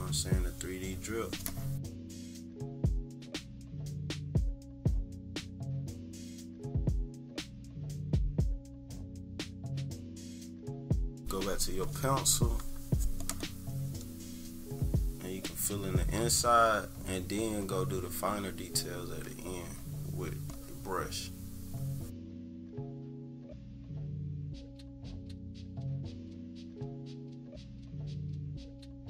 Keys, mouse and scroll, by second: 1.8 click, 2.2 scroll up 1, 2.5 =, 2.9 click, 4.6 click, 5.3 click, 5.5 click, 5.8 click, 7.9 click, 8.1 click, 8.5-10.7 typing, 8.7 click, 9.4 click, 9.9 click, 10.3 scroll up 2, 10.5 scroll down 2, 10.7 scroll up 2, 10.9 click, 11.3 click, 12.6 click, 14.0-23.1 drag, 23.3 -, 23.3 click, 23.5 =, 23.6 click, 23.8 click, 24.3 click, 27.3 -, 27.6 click, 27.7 =, 27.8 click, 27.9 click.